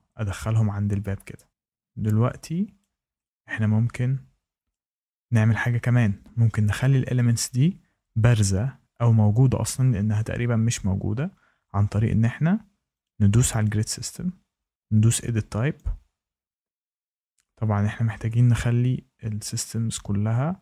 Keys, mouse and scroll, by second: 1.5-2.7 shift+scroll, 2.7 click, 4.6 shift+middle click, 13.0 click, 13.6 click, 15.7 click, 19.6 click.